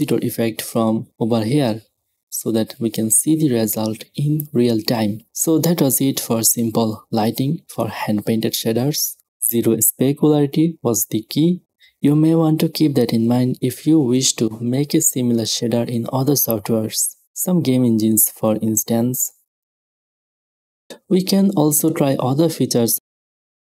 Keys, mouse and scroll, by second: 0.0-2.5 drag, 1.4 KP_0, 2.5 KP_0, 4.2-7.6 middle drag, 5.6 KP_0, 7.6 click, 7.7-9.0 middle drag, 9.1-11.0 drag, 9.1 middle click, 12.4-16.9 drag, 16.9 middle click, 17.5-18.3 middle drag, 19.0 middle click, 19.2 click, 19.7 middle click, 20.6 click, 21.5 middle click, 21.6 click, 21.7-22.0 middle drag, 22.0 drag, 23.0 click, 23.5 right click.